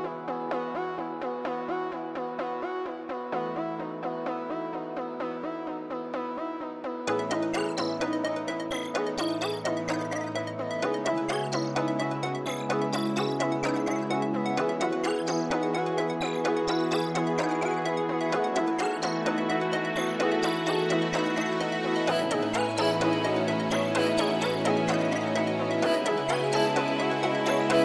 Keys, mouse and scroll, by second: 3.4 scroll up 1, 3.8-4.1 scroll down 1, 4.3 scroll up 1, 4.4 scroll down 1, 4.6 middle click, 6.1-8.2 scroll up 1, 26.2-27.8 scroll up 1.